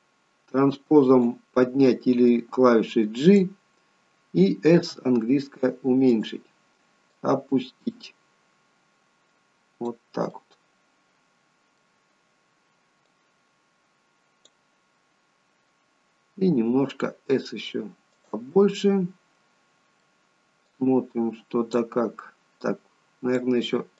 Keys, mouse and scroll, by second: 4.8 s, 7.2 click, 10.4 middle click, 13.1 click, 18.8 middle click, 20.8 click, 22.6 click.